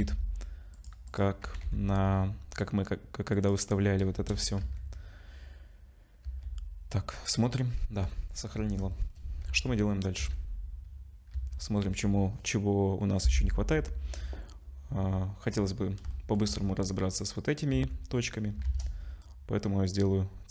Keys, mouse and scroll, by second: 1.1 click, 1.4 g, 4.1 KP_0, 4.6 z, 6.2 z, 7.4-7.8 scroll down 1, 7.8 z, 8.2 scroll down 4, 8.6 ctrl+s, 8.9 shift+middle click, 9.5 z, 10.2 z, 11.3 z, 11.8 scroll up 2, 13.8-14.4 scroll up 2, 15.5-16.0 scroll up 3, 16.1 shift+middle click, 17.7 z, 18.4 scroll down 1, 18.6 shift+a.